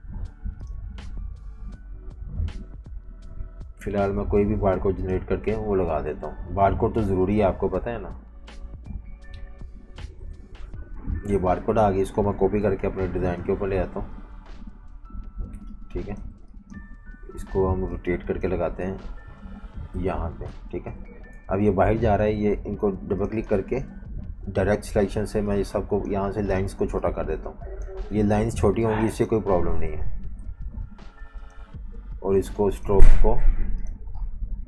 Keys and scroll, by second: 12.3 super+c, 14.4 super+v, 21.3 super+g, 28.8 v, 30.4 i.